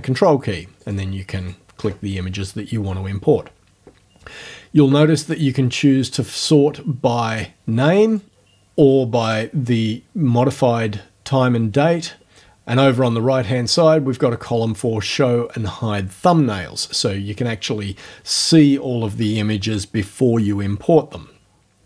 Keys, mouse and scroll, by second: 0.2 ctrl+click, 0.8 ctrl+click, 1.4 ctrl+click, 5.3 click, 7.3 click, 8.1 click, 9.3 click, 16.9 click.